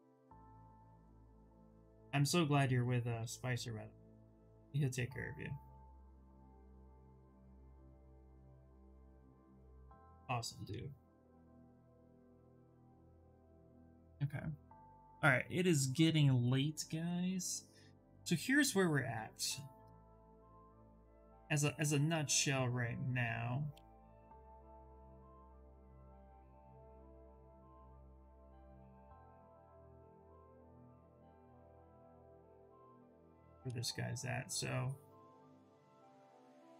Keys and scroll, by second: 5.4 Escape, 13.3 Return, 23.3 w, 32.4 ctrl+z, 33.3 q.